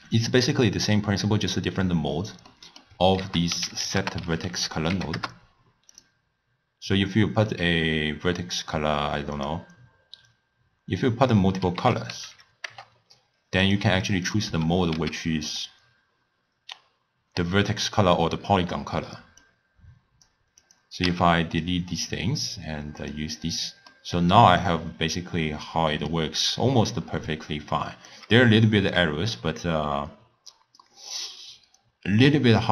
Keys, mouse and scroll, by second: 5.5 ctrl+a, 9.6 click, 15.3 x, 20.7 click, 21.5 x, 21.7-24.8 drag, 24.8-27.3 middle drag, 27.3-28.1 drag, 28.1 d, 28.2 d, 29.0-32.0 drag.